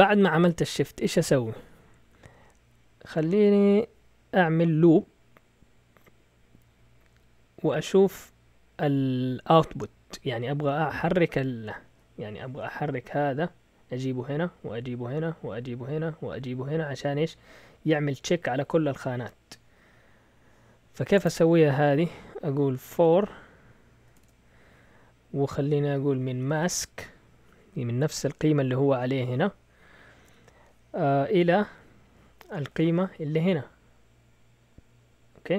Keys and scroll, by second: 11.9 alt+Tab, 22.7-24.1 typing, 26.0-27.1 typing.